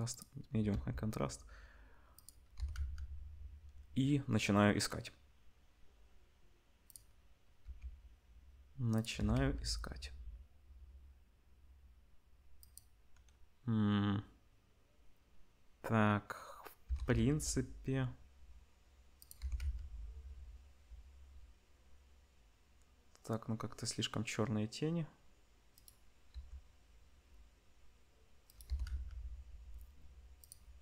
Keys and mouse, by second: 0.7 r, 2.3-26.3 middle drag, 2.6 r, 7.6 r, 9.1 r, 16.8 r, 19.4 r, 26.3 r, 28.7 r.